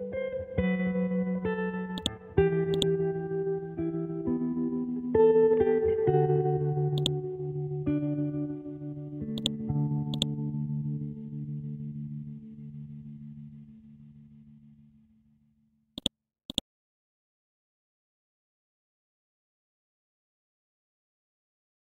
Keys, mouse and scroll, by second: 0.2 ctrl+End, 2.0-6.5 drag, 7.0 click, 9.4 click, 11.7 Right, 12.6 ctrl+shift+Left, 13.3-14.8 typing, 16.0 click, 17.1-18.9 scroll up 1.